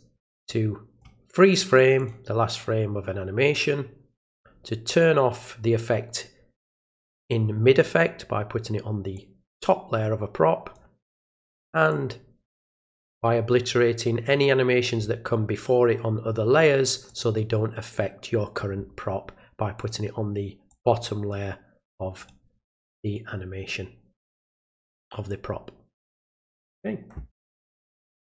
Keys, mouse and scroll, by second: 0.5-1.0 drag, 2.0 click, 9.1-10.7 drag, 11.9-13.7 drag, 17.1 click, 19.8 click, 20.7-21.3 drag, 22.2 click, 28.3 click.